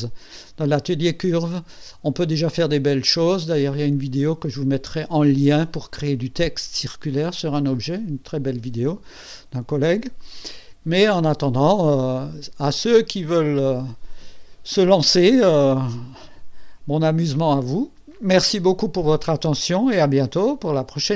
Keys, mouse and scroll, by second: 10.2 click, 11.9 scroll up 2, 17.0 click.